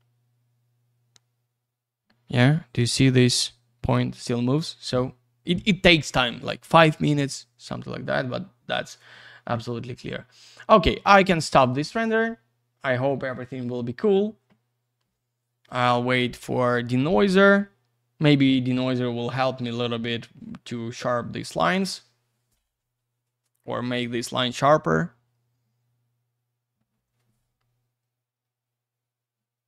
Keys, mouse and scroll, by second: 9.8-10.7 scroll down 1, 11.3 click, 12.6 click.